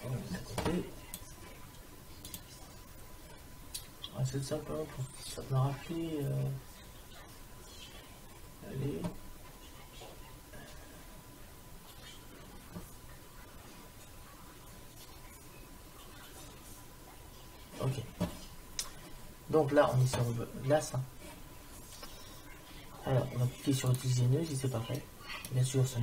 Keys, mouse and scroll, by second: 23.9-26.0 drag.